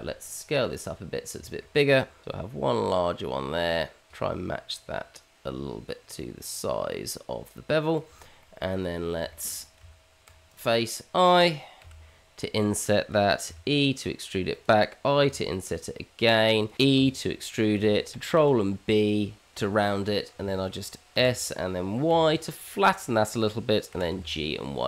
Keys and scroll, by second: 1.4 s, 2.3 g, 6.0 s, 6.5 g, 9.8 Tab, 12.9 i, 13.5 e, 15.2 i, 16.9 e, 18.4 ctrl+b, 21.1 s, 23.9 g.